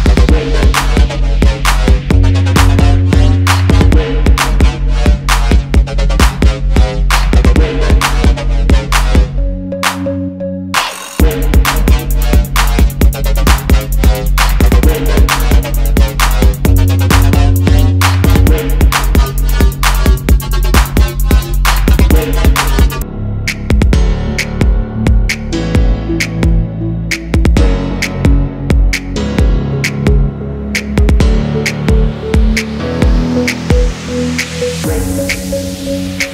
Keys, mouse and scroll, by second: 0.4 double click, 1.3 alt+scroll down 1, 2.2 ctrl+g, 4.3 shift+click, 4.9 m, 5.8 alt+scroll up 1, 6.8 alt+scroll up 1, 7.4 alt+scroll down 1, 8.4 v, 8.8 double click, 11.4 alt+scroll up 1, 12.2 shift+click, 12.8 shift+click, 13.7 m, 14.2 alt+scroll up 1, 14.8 alt+click, 16.3 alt+click, 17.8 alt+click, 19.1 alt+scroll down 1, 19.7 alt+scroll up 1, 20.2 alt+click, 21.7 alt+click, 23.2 alt+scroll down 1, 24.2 v, 24.5 double click, 25.1-25.5 alt+scroll down 1, 25.9 alt+scroll down 1, 26.3 space, 26.8 alt+scroll up 1, 27.1 space, 29.8 double click, 30.5 double click, 30.8 space, 31.4 double click, 33.4 ctrl+z, 33.8 ctrl+z, 34.5 double click.